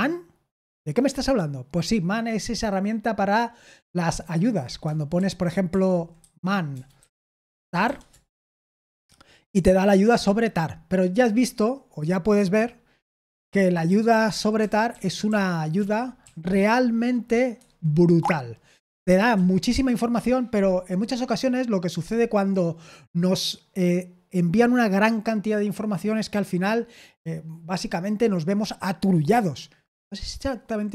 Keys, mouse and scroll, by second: 5.1 super+l, 5.6 super+l, 6.1-8.3 typing, 13.4 ctrl+d, 13.8 ctrl+d, 14.3 ctrl+d, 14.6-16.5 ctrl+d, 17.5 Escape, 18.1 q.